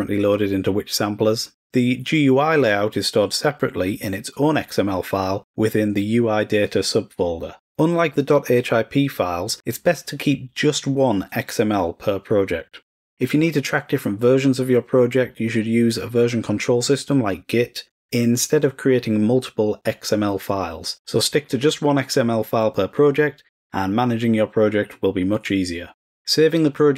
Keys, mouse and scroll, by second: 6.6 click, 17.4 click, 17.6 click.